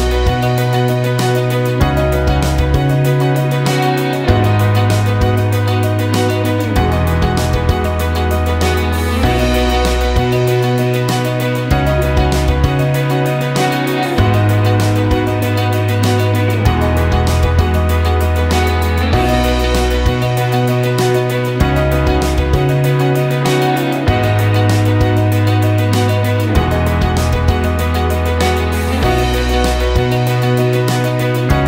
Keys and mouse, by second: 0.7 ctrl+KP_1, 2.2 click, 3.1 KP_7, 3.8 g, 7.9 ctrl+KP_1, 9.2 click, 9.7 KP_7, 10.0 g, 11.7 ctrl+KP_1, 12.4 click, 12.9 KP_7, 13.2 g, 15.1 ctrl+KP_1, 15.8 click, 16.3 KP_7, 16.7 g, 18.2 ctrl+KP_1, 19.4 click, 20.4 KP_7, 21.8 g, 27.4 click, 28.3 ctrl+KP_1, 29.8 KP_7, 30.5 g.